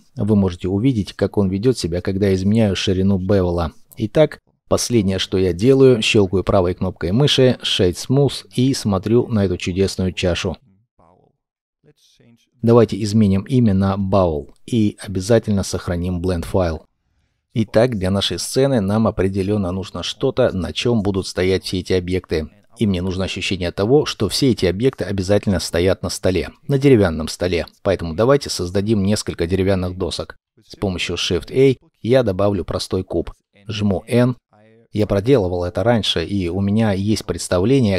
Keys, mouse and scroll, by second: 4.3 scroll down 1, 4.5 shift+middle click, 7.4 scroll down 1, 8.1 middle click, 12.1 double click, 13.4-14.3 typing, 14.4 scroll down 1, 14.8 middle click, 17.0 ctrl+s, 27.2-27.8 scroll down 1, 27.8 shift+middle click, 30.2 shift+a, 31.8-32.6 scroll down 1, 32.6 shift+middle click, 33.3 n.